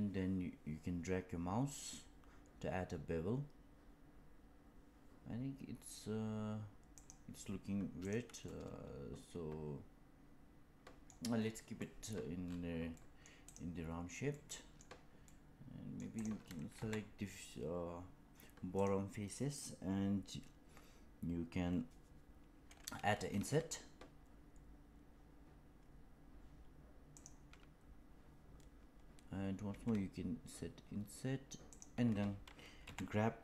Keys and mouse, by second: 7.9 click, 8.4-11.0 middle drag, 11.7 middle click, 12.9 middle click, 13.4 click, 14.3 middle click, 15.3 middle click, 16.1 click, 16.7 3, 18.7 click, 23.2 i, 29.6 i, 32.7 g.